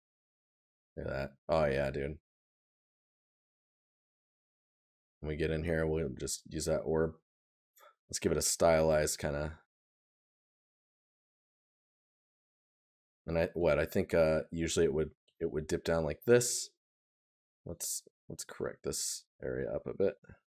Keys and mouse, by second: 0.6 right click, 3.9 right click.